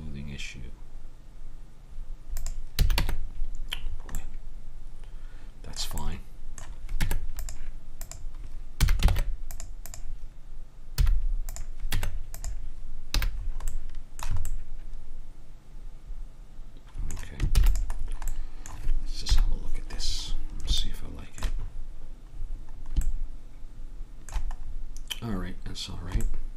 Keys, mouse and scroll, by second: 2.8 a, 3.0 Tab, 3.9-5.3 middle drag, 7.0 Tab, 8.0 click, 8.8 a, 9.1 ctrl+Tab, 11.0 x, 12.0 Tab, 13.2 a, 13.4-15.3 middle drag, 15.4 middle click, 17.6 ctrl+s, 19.3 KP_1.